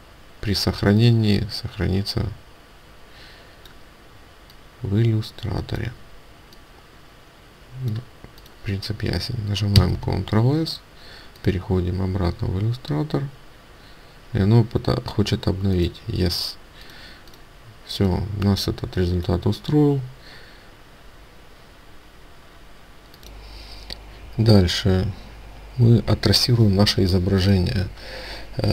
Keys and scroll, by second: 9.8 ctrl+s.